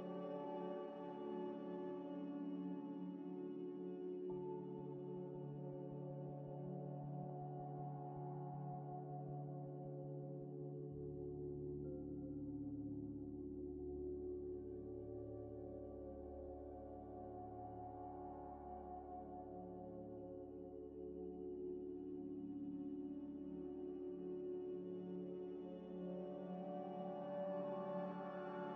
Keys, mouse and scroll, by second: 1.4 scroll down 1, 2.2 scroll up 1, 2.8 scroll up 1, 3.7 scroll down 1, 4.9 z, 5.6 z, 5.9 scroll down 1, 6.2 z, 7.3 double click, 8.8 Tab, 9.0 Tab, 9.0 Tab, 9.4 shift+a, 10.6-12.8 typing, 11.3 KP_Enter, 11.7 Return, 12.4 Tab, 13.8 Tab, 14.2 g, 15.0 s, 15.4 scroll up 1, 15.6 scroll down 1, 15.6-16.4 scroll up 1, 16.8 z, 17.2 scroll up 1, 17.3 middle click, 17.6 ctrl+z, 17.8 ctrl+z, 18.5 double click, 19.4 z, 20.1 scroll down 1, 20.7 middle click, 21.5 g, 21.6 x, 21.9 y, 23.0 scroll up 1, 23.3 g, 24.1 g, 24.6 scroll down 1, 24.9 middle click, 27.5 scroll up 1, 28.2 g.